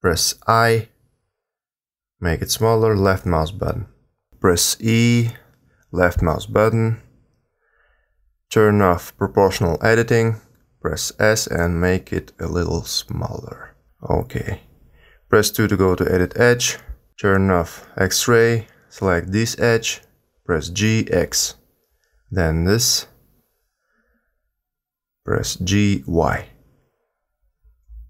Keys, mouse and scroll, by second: 0.3 i, 4.3 e, 9.3 click, 10.5 s, 14.5 2, 17.4 click, 20.0 click, 21.2 g, 25.0 click, 25.5 g.